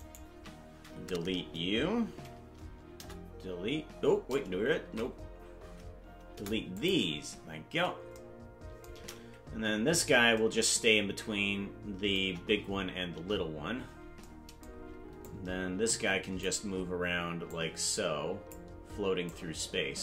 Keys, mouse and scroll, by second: 0.0 shift+right click, 3.1 Delete, 5.4 ctrl+z, 6.3 Delete, 9.5 KP_Decimal, 10.1 scroll down 2, 12.2 KP_0, 13.1 KP_0, 15.3-16.5 drag, 17.4-18.5 drag, 19.2-20.0 drag.